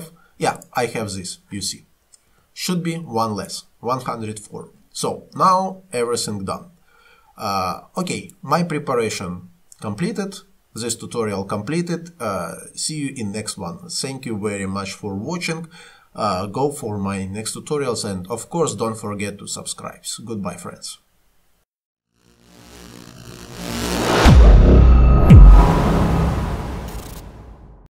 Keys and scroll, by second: 2.3 Delete.